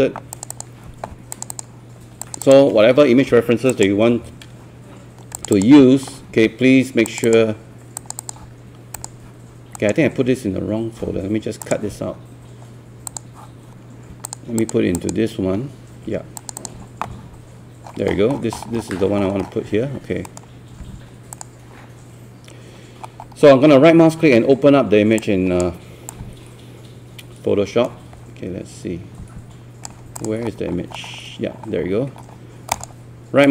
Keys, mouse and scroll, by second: 9.8 right click, 11.6 click, 17.9 scroll down 1, 20.3-21.4 right drag, 21.4-22.4 drag, 23.0 scroll up 1, 23.7-25.2 scroll down 1, 25.2-30.2 drag, 30.4-31.4 scroll up 1, 31.4-32.7 scroll down 1, 32.7 right click.